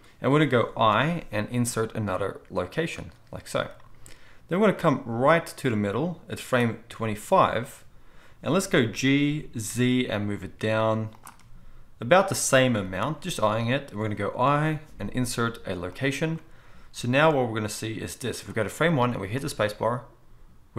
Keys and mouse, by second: 0.9 i, 8.9 g, 11.2-17.2 middle drag, 12.7 g, 14.5 i, 17.2-20.7 drag, 19.3 space.